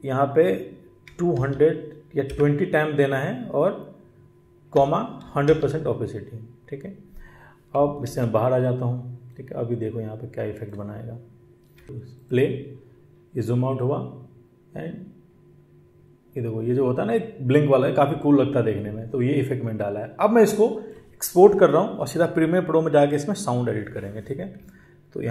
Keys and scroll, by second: 2.2 space, 7.9 ctrl+1, 8.1 ctrl+1, 11.7 space.